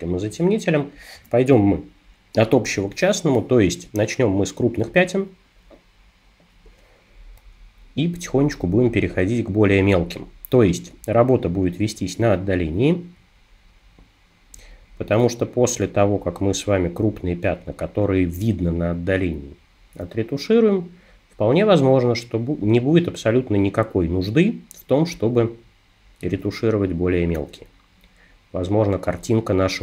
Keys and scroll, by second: 1.2 super+-.